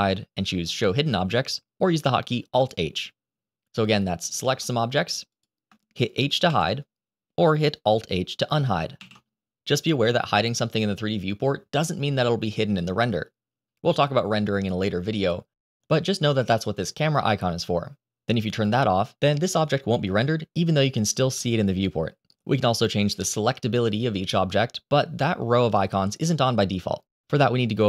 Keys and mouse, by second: 4.1 click, 5.2 shift+click, 6.3 h, 8.8 alt+h.